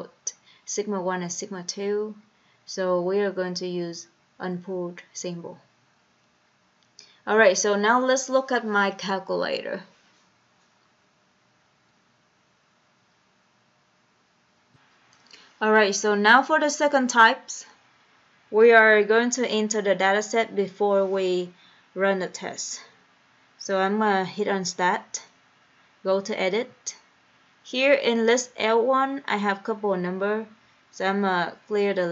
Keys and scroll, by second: 26.9 Return.